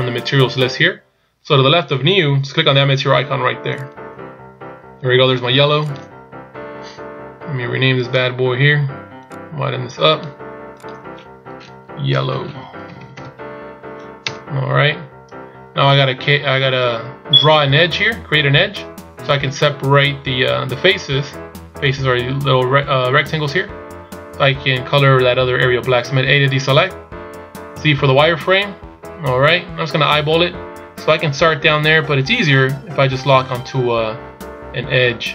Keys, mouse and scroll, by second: 4.1 click, 9.6 click, 11.0 click, 13.3 click, 26.6 a, 27.9 z, 30.1-31.1 scroll up 1.